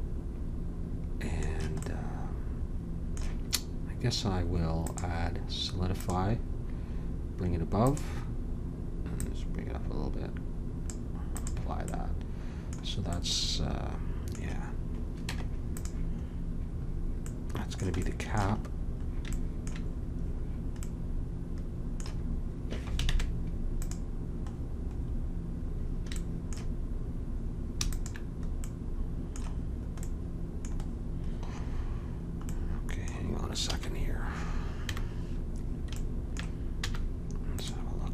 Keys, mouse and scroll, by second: 1.9-4.1 middle drag, 4.8-6.7 drag, 7.8-11.0 drag, 11.3-13.1 drag, 13.1-15.2 middle drag, 15.8 Tab, 23.0 ctrl+Tab, 27.9-29.7 drag, 29.7 middle click, 33.7 a, 34.9 KP_1, 36.8 z.